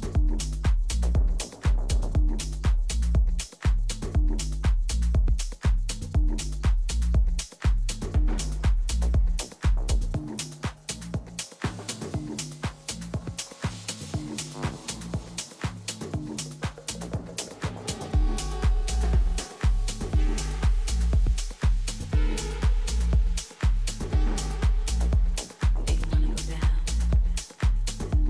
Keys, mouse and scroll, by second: 2.2-4.2 middle drag, 4.4-6.3 drag, 6.4-8.8 middle drag, 10.7 KP_3, 11.7 z, 12.2-14.2 middle drag, 12.8 a, 19.0 b, 21.6-23.4 drag, 23.9 ctrl+z, 25.3-27.4 drag, 26.1 middle click, 27.0 a.